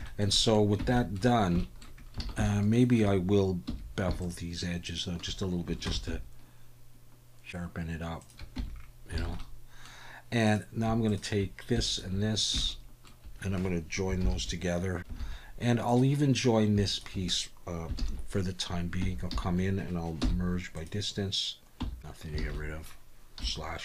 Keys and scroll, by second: 0.8 Tab, 2.2 alt+a, 3.7 2, 5.9 ctrl+b, 8.6 Tab, 9.2 alt+a, 14.2 ctrl+j, 15.2 alt+a, 18.0 ctrl+j, 19.0 Tab, 19.3 a, 20.2 m, 21.8 Tab, 22.4 alt+a, 23.4 /.